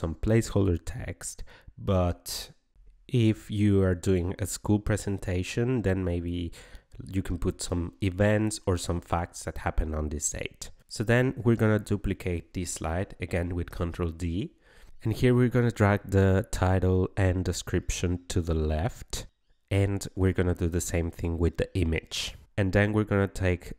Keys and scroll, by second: 11.6 ctrl+d.